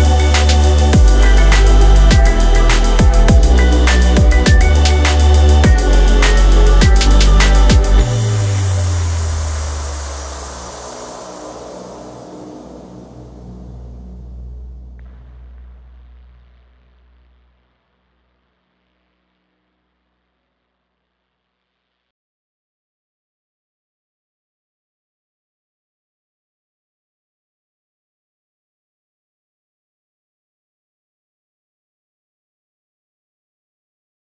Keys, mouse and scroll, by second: 8.4 r.